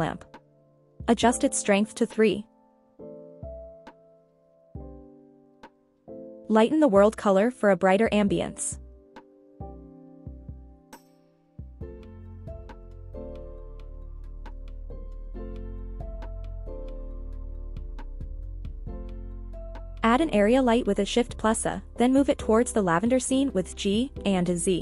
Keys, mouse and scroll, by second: 8.1 click, 9.2 click, 21.0 shift+a, 24.3 g, 24.7 z.